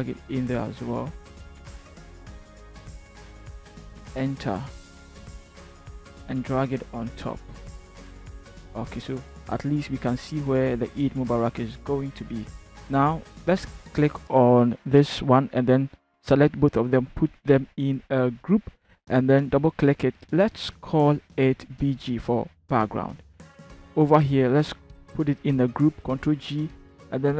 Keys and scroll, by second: 4.1 Return, 18.2 ctrl+g, 21.7 b, 22.0 g, 22.2 Return, 25.7 ctrl+g.